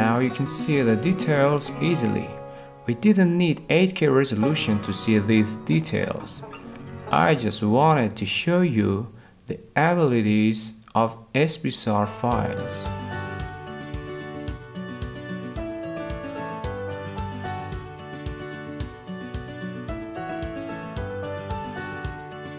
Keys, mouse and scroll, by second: 2.6-3.7 middle drag, 21.1-22.3 drag.